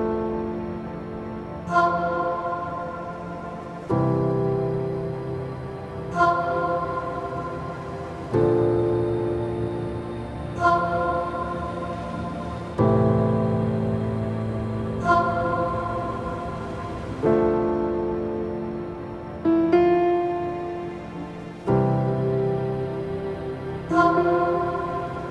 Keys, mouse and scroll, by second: 0.0 alt+click, 0.7-2.2 scroll up 1, 3.0-4.9 drag, 9.5 click, 10.3 Tab, 11.5-12.2 middle drag, 12.2 click, 12.5 Tab, 12.9 middle click, 13.4 click, 15.3-18.2 drag, 20.2 click, 21.1 Tab, 21.5-21.9 scroll down 2, 21.9-22.6 middle drag, 22.6 scroll down 2, 22.9-24.5 middle drag, 24.5-25.0 scroll up 1, 25.0 scroll up 1, 25.2-25.3 middle drag.